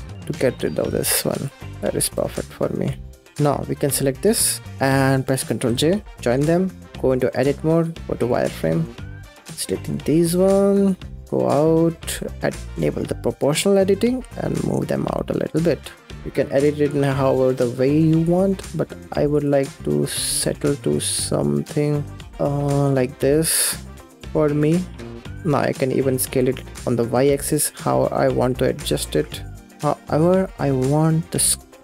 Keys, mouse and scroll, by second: 0.4-1.7 drag, 1.7 middle drag, 1.9 space, 3.0 space, 3.2 ctrl+s, 3.5 click, 4.4-4.7 scroll up 5, 4.7 Tab, 5.5 ctrl+j, 6.2 Tab, 6.6 middle click, 7.6 click, 8.0 z, 9.2 click, 10.6 middle click, 11.0 z, 13.1 click, 13.5 middle click, 14.0 g, 19.5 click, 20.3 middle click, 20.6 click, 20.7 middle click, 21.1 shift+click, 21.4 middle click, 21.5 g, 23.0 middle click, 23.9 Tab, 24.1 click, 24.3 scroll down 4, 24.7-25.2 middle drag, 25.2 click, 25.7 s, 29.7 scroll down 4, 29.8-30.3 middle drag, 30.3 click, 30.6 middle click, 31.5 Tab, 31.7 middle click.